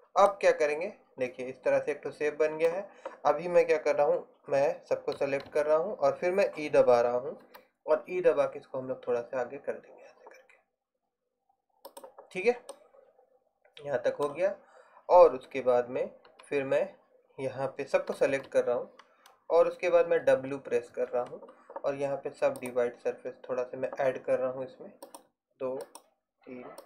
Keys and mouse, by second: 5.3 a, 5.6 a, 7.5 e, 14.0-16.4 drag, 16.4 a, 18.4 a, 22.8 w, 25.3-26.8 drag.